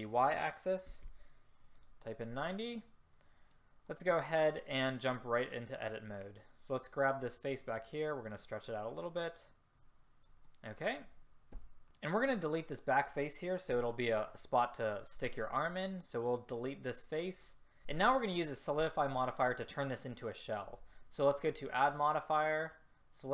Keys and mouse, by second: 2.5-3.0 middle drag, 3.0-5.1 drag, 7.8-10.5 drag, 11.7 a, 13.8 Delete, 21.5-23.3 drag.